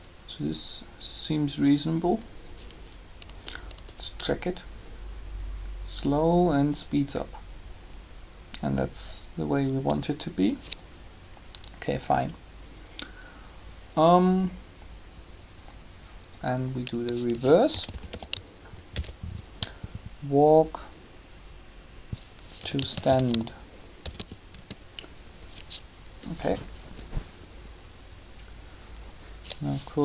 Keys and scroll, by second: 3.2 Tab, 17.2-18.9 typing, 22.5-24.5 typing, 24.5 Return, 26.8 3.